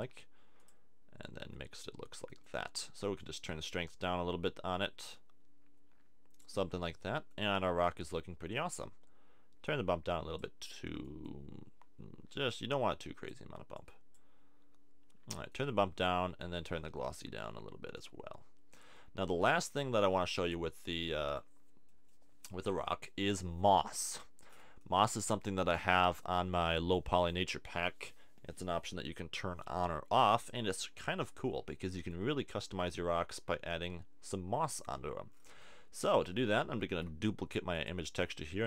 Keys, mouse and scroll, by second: 20.0 middle click, 36.8 shift+d.